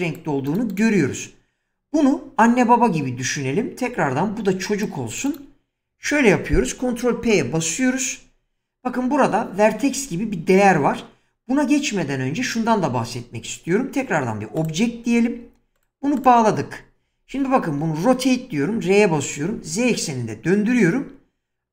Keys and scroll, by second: 0.9 <, 4.2 <, 7.3 ctrl+p, 17.8 r, 19.4 z.